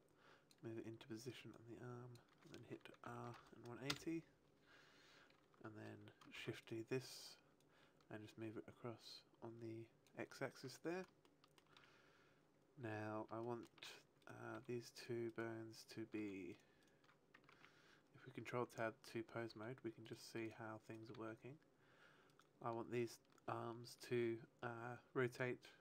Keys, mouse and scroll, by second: 1.5 click, 3.0 r, 6.3 shift+d, 6.6 right click, 7.5 click, 11.2 shift+middle click, 13.4 shift+middle click, 14.1 right click, 14.3 r, 15.0 right click, 15.2 right click, 15.7 right click, 16.1 r, 16.5 right click, 16.7 right click, 17.4 ctrl+Tab, 19.4 r, 20.0 right click, 20.4 right click, 20.8 right click, 21.1 r, 22.3 right click, 24.0 r.